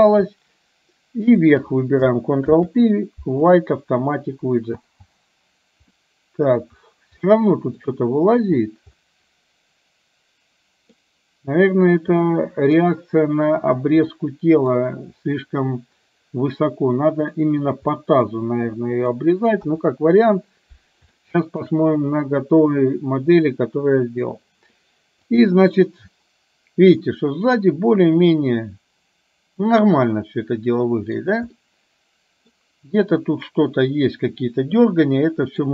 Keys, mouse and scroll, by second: 1.4 shift+click, 2.5 ctrl+p, 4.9 space, 6.0-6.8 middle drag, 7.4-7.9 middle drag, 8.0-8.5 middle drag, 9.2-11.2 middle drag, 12.4-12.9 middle drag, 14.2-14.8 middle drag, 18.0-19.2 middle drag, 19.8 KP_1, 21.3 shift+middle click, 22.3-24.4 middle drag, 25.4 drag, 25.8-27.0 middle drag, 27.7-31.3 middle drag, 31.7-32.5 middle drag, 35.0-35.7 middle drag.